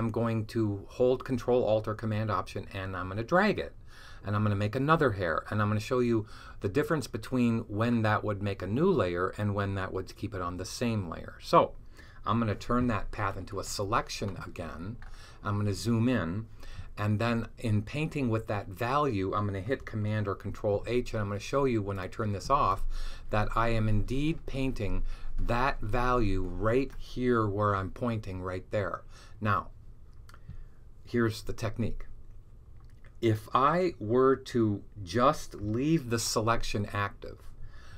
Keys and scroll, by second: 20.3 super+h, 35.9 super+h.